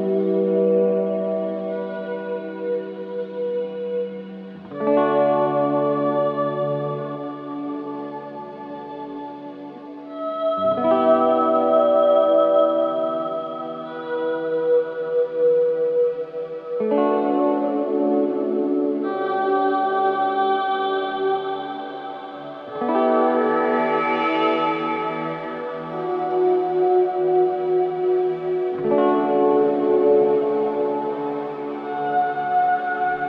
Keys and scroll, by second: 6.6 ], 8.5 4, 26.7 ], 27.3 ctrl+z, 30.5 ].